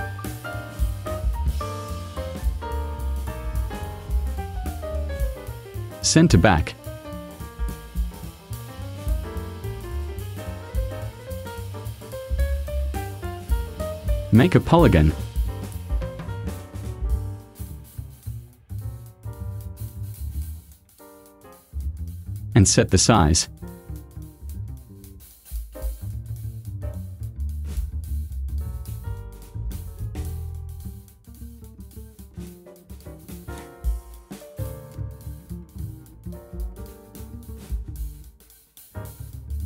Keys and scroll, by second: 9.4 v, 18.7 0, 19.1 ,, 19.8 3, 21.0 Return, 39.1 ctrl+a.